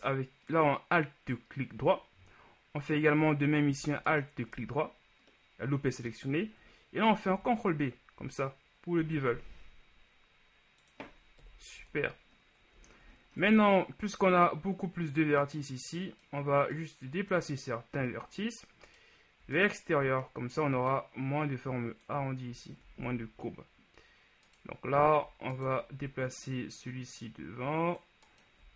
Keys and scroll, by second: 7.4 ctrl+b, 11.8 KP_1, 11.9 Tab, 13.5 shift+Tab, 23.1 ctrl+z.